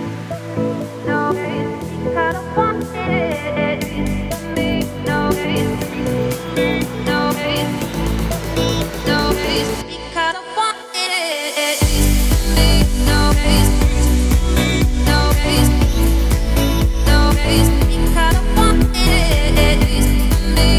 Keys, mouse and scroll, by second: 2.9-3.4 scroll down 5, 3.4-3.9 shift+middle drag, 3.9-4.6 scroll down 2, 4.6 shift+middle drag, 4.9-6.1 scroll up 4, 6.1-7.5 scroll up 7, 6.4 shift+middle drag, 7.5 click, 10.9 click, 12.7-14.4 drag.